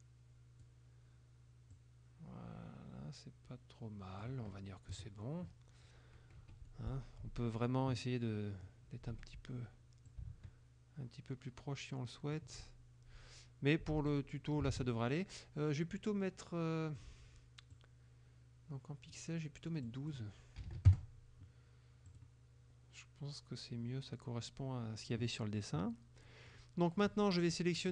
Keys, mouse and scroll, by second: 1.8-4.5 drag, 5.0 KP_Subtract, 6.5 F2, 6.8 middle click, 9.1 F1, 10.1-12.6 shift+drag, 14.2 click, 14.8 ctrl+a, 17.0 click, 17.8-19.4 drag, 19.9 click, 20.7 KP_1, 21.0 KP_Enter, 22.1 click, 26.3 middle click.